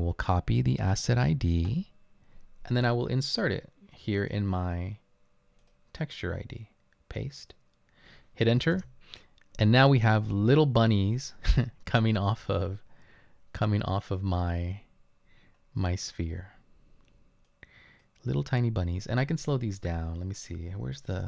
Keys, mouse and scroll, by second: 5.6 right click, 8.8 Return, 15.6-16.9 scroll up 4, 17.2 scroll up 2.